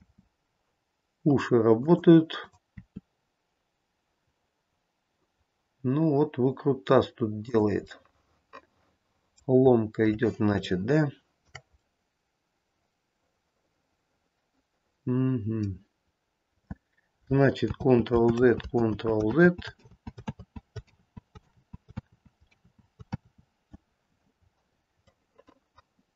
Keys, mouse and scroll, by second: 0.2 r, 2.5 click, 3.3 r, 8.2 middle click, 9.9-10.7 scroll up 1, 10.7 scroll up 1, 10.9 shift+middle click, 11.1 shift+middle click, 12.0 middle click, 17.9 ctrl+z, 18.5 ctrl+z, 19.0 ctrl+z, 19.5 ctrl+z, 20.0 ctrl+z, 20.5 ctrl+z, 21.1 ctrl+z, 21.6 ctrl+z, 22.3 ctrl+z, 22.7 ctrl+z, 23.3 ctrl+z, 24.8-25.7 scroll down 4, 25.7 middle click.